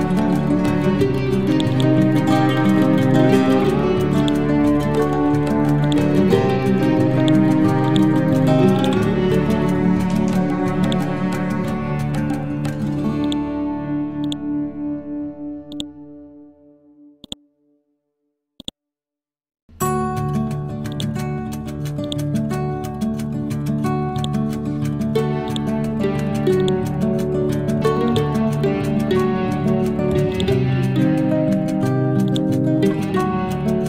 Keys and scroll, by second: 7.7 c.